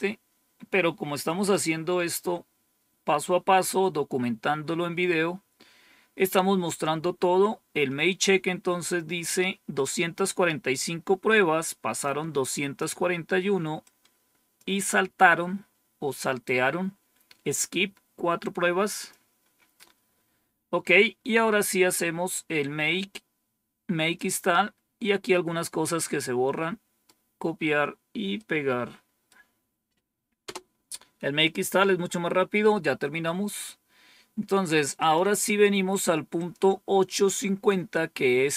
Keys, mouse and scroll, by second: 11.9 click, 13.7 click, 18.8 click, 20.5-21.2 scroll down 2, 22.5-24.1 drag, 25.9-26.9 right drag, 28.2 right click, 30.3 Return, 34.9 click, 36.2 click.